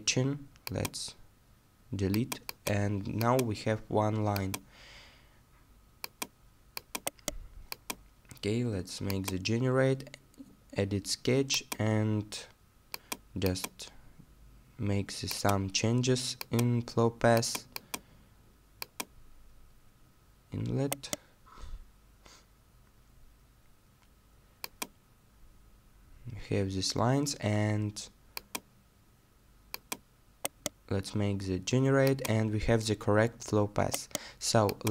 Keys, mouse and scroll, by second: 7.0 right click, 20.9 right click, 22.0-23.9 scroll down 1, 30.5 right click, 33.9 right click.